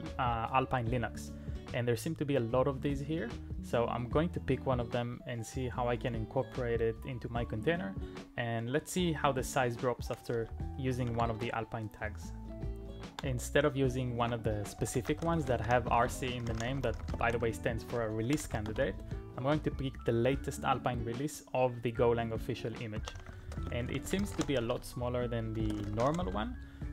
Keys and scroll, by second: 11.0 super+m, 14.2 alt+i, 14.3-19.2 typing, 22.8-26.9 typing.